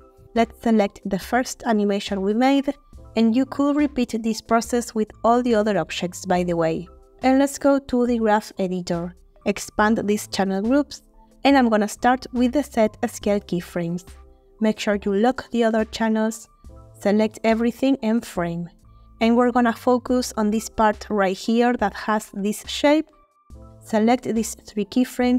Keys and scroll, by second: 17.2 a, 18.1 Home.